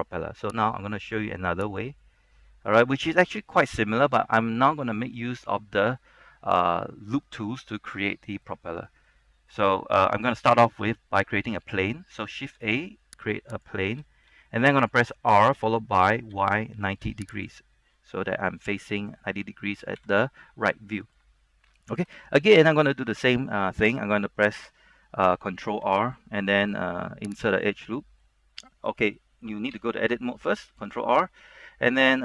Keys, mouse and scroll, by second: 0.0-0.8 scroll up 1, 0.8 click, 2.2-2.6 scroll up 1, 4.2 middle click, 4.9 shift+middle click, 5.4 middle click, 7.2-7.8 scroll up 1, 7.8 middle click, 8.2 shift+middle click, 8.7 scroll up 1, 9.2-10.6 shift+middle drag, 13.6 click, 13.6 shift+a, 14.6-15.7 scroll up 1, 15.7-17.1 typing, 17.5 click, 17.9 scroll down 1, 18.1 middle click, 20.1 KP_3, 21.1 shift+middle click, 21.6 scroll up 1, 22.0 shift+middle click, 25.8 ctrl+r, 27.6 right click, 28.4 middle click, 29.9 Tab, 30.3 middle click, 30.8 ctrl+r.